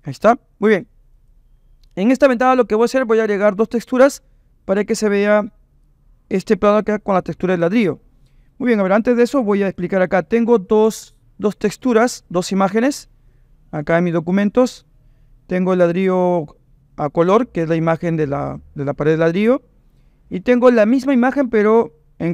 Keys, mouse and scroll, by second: 1.1-2.4 drag.